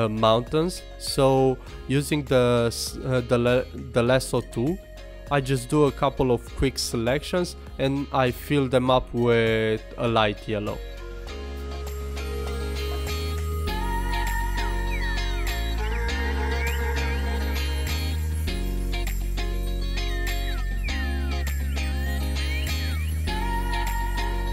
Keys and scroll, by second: 4.7 alt+space, 4.9 super+z, 5.6 super+z, 5.9 alt+BackSpace, 6.8 super+z, 7.4 super+z, 7.8 alt+BackSpace, 8.2 super+z, 8.5 super+z, 10.4 super+z, 11.2 super+z, 12.9 super+z, 13.3 super+z, 16.8 super+z, 19.1 super+z, 21.7 super+z.